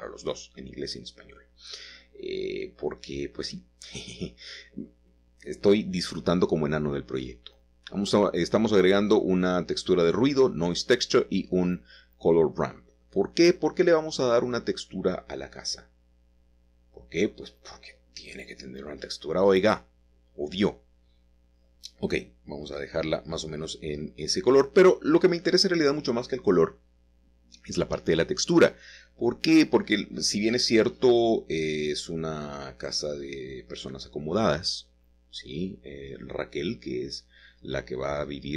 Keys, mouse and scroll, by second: 1.6 alt+h, 3.1-8.2 middle drag, 8.2 click, 11.1 shift+middle click, 11.5 a, 13.8 click, 16.4 click, 16.9 shift+a, 18.8 click, 19.7-21.9 drag, 23.4-24.7 drag, 26.2 click, 27.2-28.6 scroll up 1, 28.6 click, 29.7-32.6 drag, 33.1-35.7 drag, 36.1-36.8 scroll up 1, 36.8-38.5 shift+middle drag.